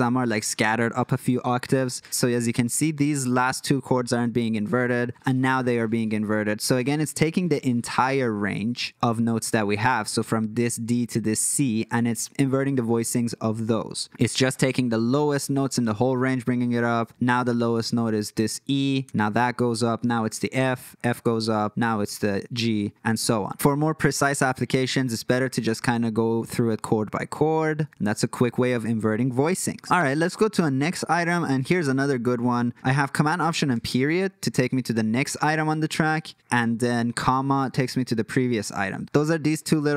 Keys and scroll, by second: 1.9 ctrl+shift+super+KP_8, 2.1 ctrl+shift+super+KP_8, 5.7 ctrl+shift+super+KP_2, 6.1 ctrl+shift+super+KP_2, 6.6 ctrl+shift+super+KP_2, 14.0 ctrl+shift+super+KP_8, 15.8 ctrl+shift+super+KP_8, 22.0 ctrl+shift+super+KP_8, 23.2 super+z, 24.8 ctrl+shift+super+KP_8, 25.1 ctrl+shift+super+KP_2, 25.3 ctrl+shift+super+KP_2, 33.9 alt+super+., 35.8 alt+super+,, 37.6 alt+,, 38.1 alt+., 38.4 alt+., 38.8 alt+,.